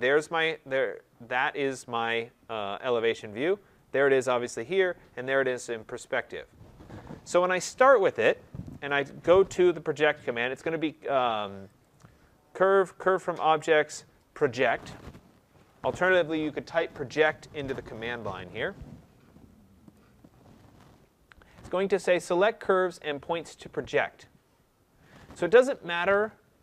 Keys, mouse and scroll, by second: 1.2 click, 3.1 click, 7.2 Escape, 7.5 Escape, 11.8 click, 16.8 click, 19.9-26.6 drag.